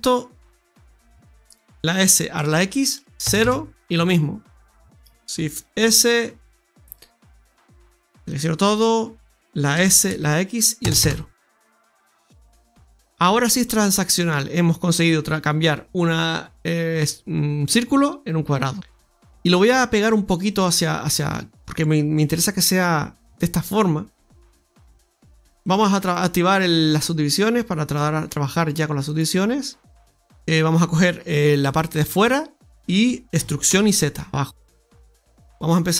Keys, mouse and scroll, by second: 1.8 s, 4.8 right click, 5.5 shift+s, 8.2 click, 9.7 s, 11.7 scroll down 1, 12.3 Tab, 12.3-12.6 scroll down 1, 12.6 middle click, 13.8 middle click, 18.7 shift+right click, 18.9 middle click, 19.3 click, 20.5 click, 21.0 middle click, 22.2 click, 24.3 click, 25.0 click, 25.0 middle click, 25.5 click, 25.9 click, 26.4 click, 28.9 click, 30.1 Tab, 30.1 middle click, 30.1-31.0 scroll up 1, 31.6 right click, 32.0 alt+shift+right click.